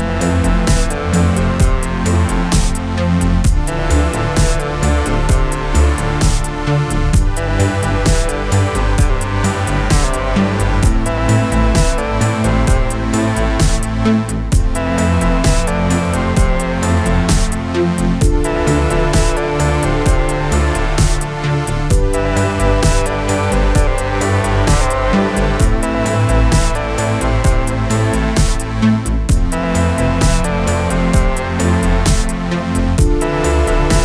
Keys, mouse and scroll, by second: 0.7-1.3 middle drag, 1.3-1.6 scroll up 2, 1.6-3.8 shift+middle drag, 3.8 click, 5.4-8.3 middle drag, 8.3 alt+a, 8.7-9.9 middle drag, 9.9 click, 10.6-12.9 middle drag, 12.9-13.5 scroll up 2, 13.5 2, 13.8 alt+click, 15.1-15.7 drag, 15.7-21.3 middle drag, 21.3 click, 22.2-23.7 middle drag, 23.7 ctrl+click, 24.2-26.5 middle drag, 26.5 shift+click, 27.3 click, 27.9-30.4 shift+middle drag, 30.4 alt+a, 31.4-32.5 drag, 32.5-34.0 middle drag.